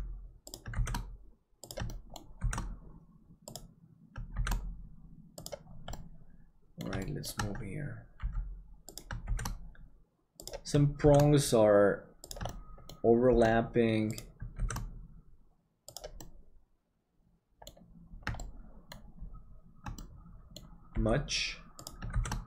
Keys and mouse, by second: 0.7 shift+d, 1.9 shift+middle click, 4.5 shift+d, 6.0 middle click, 7.0 shift+middle click, 8.2 g, 9.2 shift+d, 11.1 shift+d, 12.5 shift+middle click, 16.2-17.8 middle drag, 18.5 shift+middle click, 20.0 middle click, 20.9 g, 22.1 shift+d.